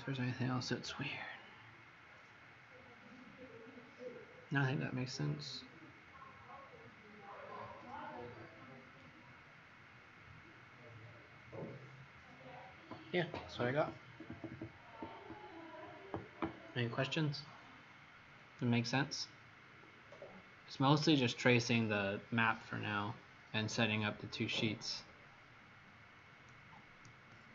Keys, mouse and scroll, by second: 4.7 click.